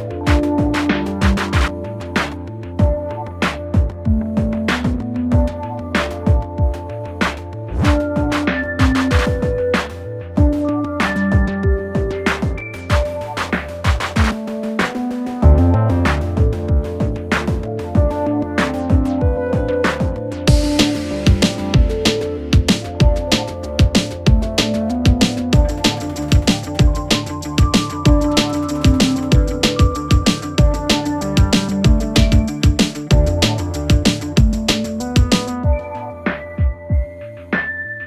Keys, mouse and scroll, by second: 1.2 click, 3.6-5.1 alt+scroll down 2, 5.1-5.4 alt+scroll up 1, 6.4-8.0 drag, 12.1-12.4 alt+scroll up 1, 12.7 space, 12.9 click, 13.0 space, 14.5 space, 14.6-16.5 drag, 16.5 space, 19.2 super+d, 20.3-26.6 drag, 21.2-24.1 drag, 29.2 space, 29.5 click, 30.8 p, 31.8 click, 37.3 click.